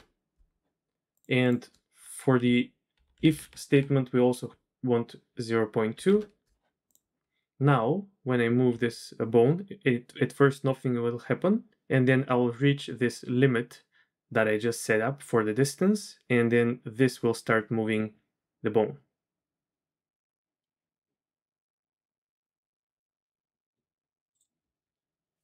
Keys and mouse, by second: 1.1-3.2 drag, 3.2 BackSpace, 3.4 BackSpace, 6.9 click, 8.7 r, 11.8 typing.